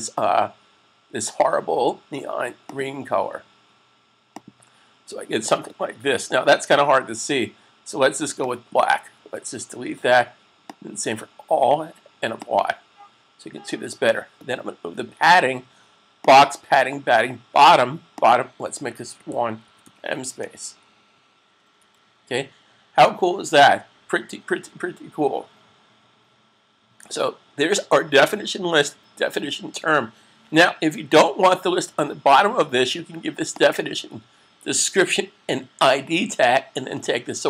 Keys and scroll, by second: 18.8-20.2 typing, 21.6 s.